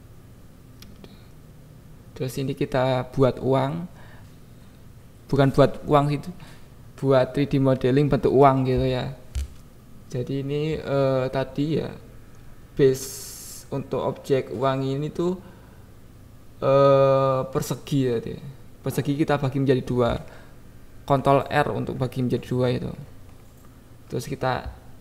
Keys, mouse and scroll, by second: 0.0 shift+a, 0.9 KP_7, 1.2 Tab, 1.7 ctrl+r, 1.9 click, 2.1 click, 2.5 x, 2.8 Tab, 3.0 Tab, 3.2 a, 3.5 g, 3.6 x, 4.5 click, 4.7 Tab, 5.1 g, 5.2 y, 5.6 x, 5.9 click, 6.3 click, 6.8 Tab, 11.1 click, 12.8 ctrl+r, 14.0 click, 14.7 click, 15.3 ctrl+b, 16.4 click, 17.0 click, 18.0 ctrl+r, 18.6 ctrl+b, 22.1 click, 22.8 KP_1, 23.1 KP_7, 23.6 click.